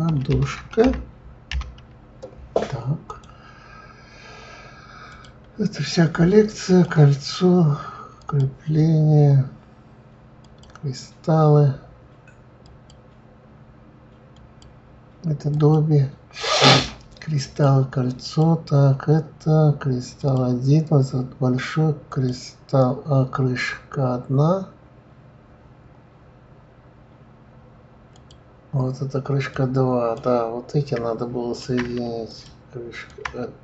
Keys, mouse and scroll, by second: 5.1 click, 6.6 click, 8.2 click, 10.4 click, 12.6 click, 14.3 click, 15.5 click, 17.4 click, 18.2 click, 20.2 click, 22.1 click, 28.1 click, 29.5 click, 32.3 shift+click, 33.1 shift+click.